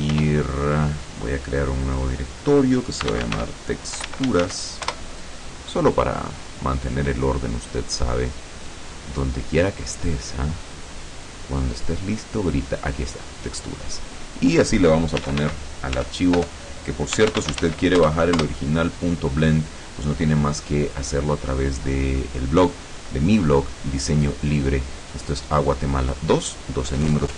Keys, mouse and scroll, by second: 0.2 i, 2.0 click, 3.2-4.6 typing, 5.0 Return, 13.2 click, 14.2 click, 15.3-17.8 typing, 18.0 Return.